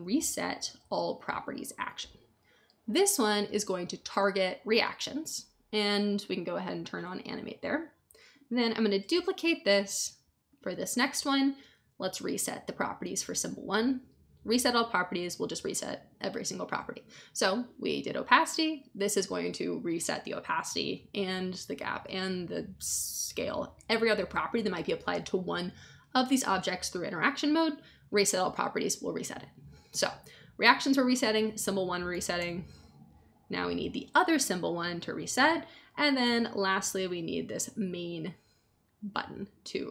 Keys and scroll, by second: 0.0-0.8 typing, 9.1 super+d, 32.3 super+d, 36.2 super+d.